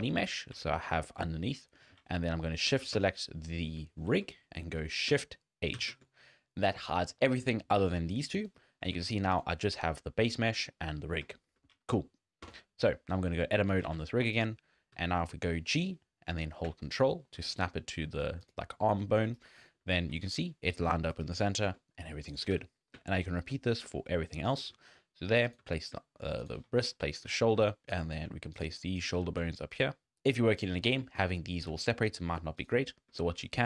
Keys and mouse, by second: 0.0 z, 0.3 drag, 0.7 shift+drag, 1.1 click, 1.8 shift+drag, 2.1 z, 2.9 shift+click, 3.7 z, 4.1 z, 5.8 shift+h, 8.9 alt+a, 10.6 shift+drag, 11.3 shift+drag, 12.5 Tab, 13.8 alt+a, 14.4 click, 14.9 g, 19.6 shift+click, 22.5 g, 26.0 ctrl+g, 27.1 shift+middle click, 27.5 g, 27.8 click, 27.8 g, 27.9 g, 29.2 g, 30.0 ctrl+g, 31.8 shift+drag, 33.2 shift+click.